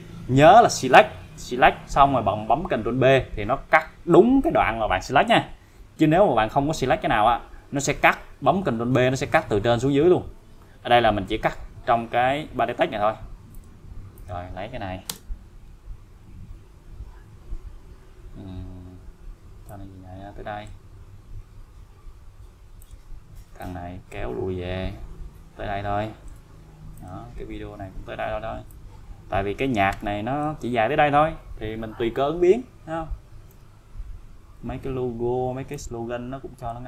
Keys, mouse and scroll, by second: 13.5 click, 15.1 BackSpace, 19.7-20.9 click, 22.8 click, 28.7-30.5 click, 32.6-33.1 scroll up 1, 33.5 n, 34.0-35.0 scroll up 1, 35.7-36.8 click.